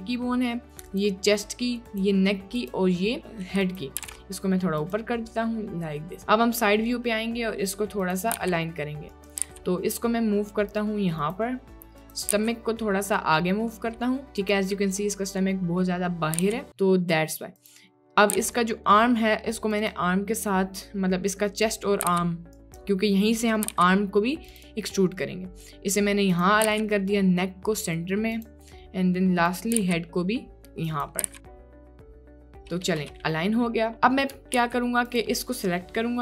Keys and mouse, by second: 0.0-1.0 drag, 2.6 click, 3.6 click, 4.1 g, 8.0 click, 8.4 g, 9.5 g, 12.6 g, 16.4 g, 17.6 click, 18.4 g, 22.1 g, 23.7 g, 24.6 click, 26.4 click, 26.7 g, 29.8 g, 31.2 g, 34.7 ctrl+s, 35.2 click.